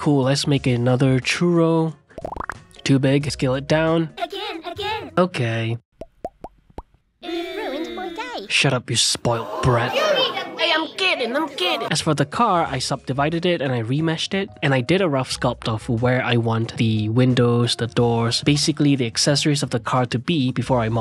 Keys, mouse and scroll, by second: 0.4 s, 0.8 right click, 1.5 s, 2.1 shift+click, 2.8 s, 4.5 Tab, 5.9-7.0 drag, 7.2 shift+click, 8.0 ctrl+l, 8.7 ctrl+l, 8.9 click, 9.1-10.3 ctrl+middle drag, 10.3 click, 10.5-11.8 middle drag, 12.8 shift+r, 14.3-17.2 drag, 17.5-19.4 drag, 19.6 ctrl+r.